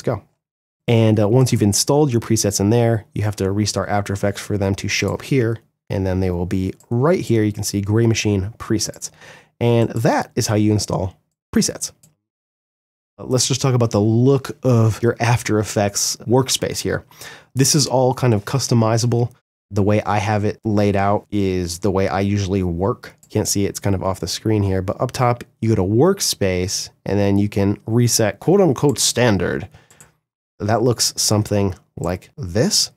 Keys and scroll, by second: 4.9 g.